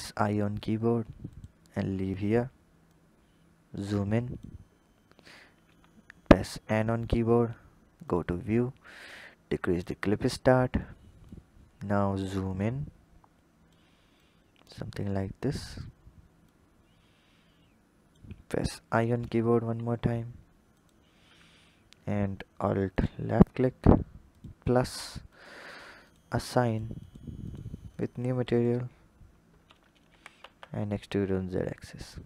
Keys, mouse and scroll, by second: 2.7-5.4 drag, 5.4 n, 7.9 click, 9.0-10.1 drag, 10.1 n, 11.1-14.6 drag, 16.3-18.6 drag, 18.6 i, 22.7 alt+click, 24.1-28.4 drag, 29.9 e.